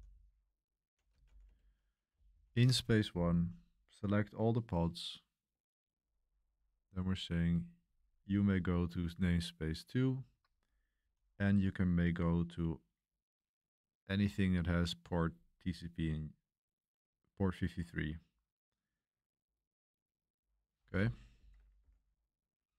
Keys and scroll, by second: 0.0-3.8 typing, 5.9-8.5 typing, 10.2-10.9 typing, 15.0 typing, 21.4 shift+;, 21.8 w.